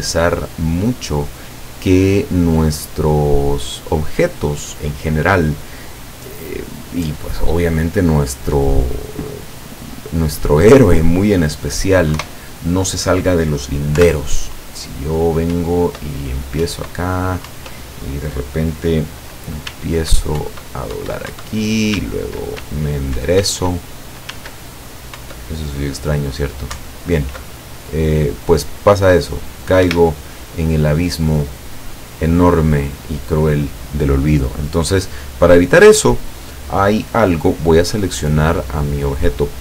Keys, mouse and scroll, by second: 12.2 KP_0, 14.0 p, 15.6 Up, 16.7 Up, 17.5 Up, 19.8 s, 20.5 Up, 22.8 w, 24.4 s, 25.2 Up, 26.8 Up, 29.9 Escape, 38.1 right click.